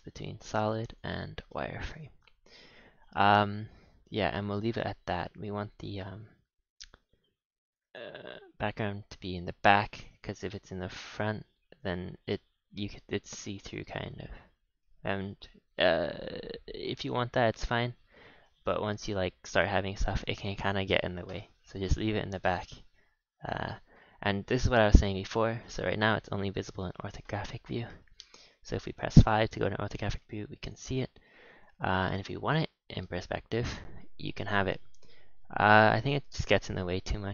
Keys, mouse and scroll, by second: 0.0-0.6 typing, 1.8-4.6 scroll up 4, 7.6 click, 10.1 click, 10.5 click, 11.2 scroll down 4, 11.4 z, 12.9 scroll up 6, 13.3-13.7 scroll down 5, 13.9 middle click, 14.4 scroll down 4, 15.2 KP_3, 15.6 KP_1, 17.3-18.6 scroll up 9, 18.6-18.9 shift+middle drag, 18.9 scroll down 2, 21.3 click, 25.8 scroll down 5, 26.1-27.8 middle drag, 27.8 KP_5, 28.6 scroll down 2, 29.2-29.9 middle drag, 29.9 a, 30.0 a, 30.2-30.6 middle drag, 30.6 click, 31.0 h, 31.5 click, 32.4 click, 33.4 KP_5, 34.4-36.3 middle drag, 36.3-36.7 scroll up 3, 36.7-37.3 middle drag.